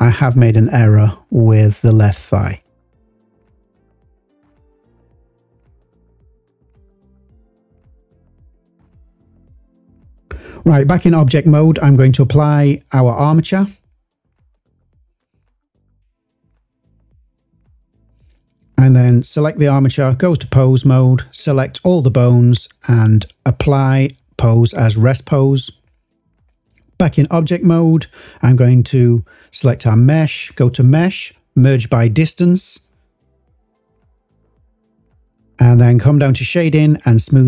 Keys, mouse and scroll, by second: 4.4 click, 5.3 click, 6.8 click, 7.4 click, 8.7 click, 9.7 click, 10.7 click, 11.6-13.5 drag, 14.2-15.1 drag, 18.9 click, 19.8-20.4 drag, 21.7 a, 22.7-24.6 drag, 25.1-25.6 drag, 28.2 click, 29.8 Tab, 30.7-32.8 drag, 33.6-37.4 drag.